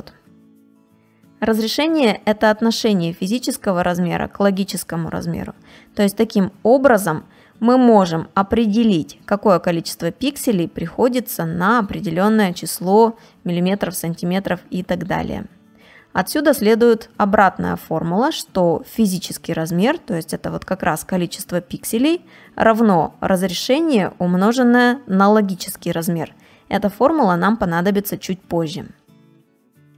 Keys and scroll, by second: 15.0 space, 27.1 space.